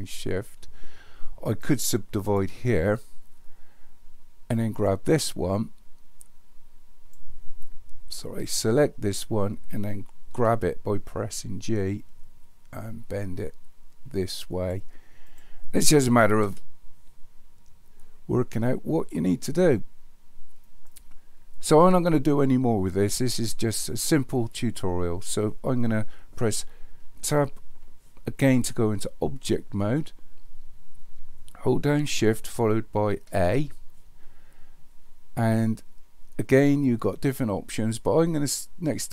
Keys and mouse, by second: 1.6 right click, 4.7 click, 6.3 click, 9.1 click, 10.3 g, 15.3 click, 16.4 g, 27.2 Tab, 33.3 shift+a.